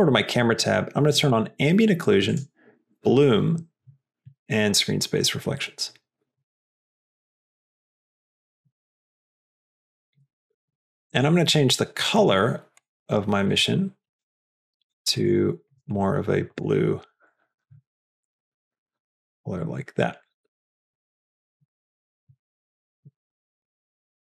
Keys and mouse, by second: 1.3 middle click, 2.4 click, 4.2 middle click, 6.2-10.4 drag, 10.8 click, 12.0 click, 12.7 click, 13.3 click, 14.2 click, 22.6 click, 23.3 click.